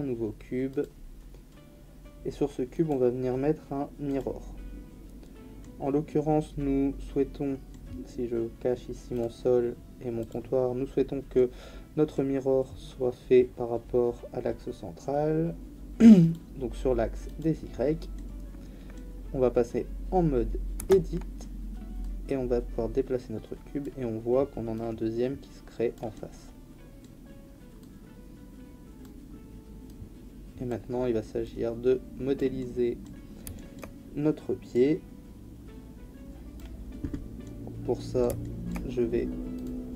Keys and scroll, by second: 20.8 Tab.